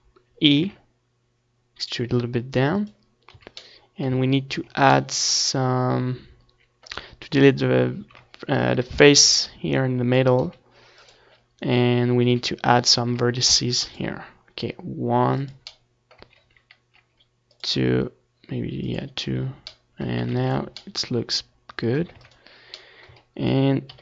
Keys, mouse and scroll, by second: 0.2 ctrl+r, 2.4-4.3 drag, 3.2 a, 3.9 ctrl+r, 6.0 click, 6.8-8.3 middle drag, 7.3 Tab, 7.6 ctrl+s, 9.4 ctrl+s, 10.3 Tab, 11.2 KP_7, 13.8 z, 14.6 KP_1, 15.1 Tab, 16.6 ctrl+s, 17.0 Tab, 17.5 z, 18.3 a, 20.1-23.8 drag, 20.4 c.